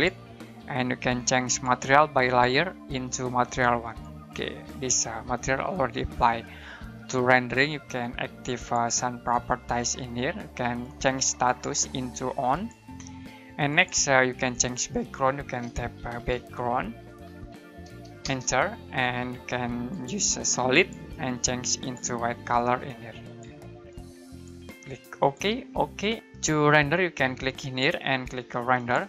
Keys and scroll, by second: 5.4 Escape, 15.9-17.2 typing, 18.2 Return, 20.4 typing, 22.4 typing.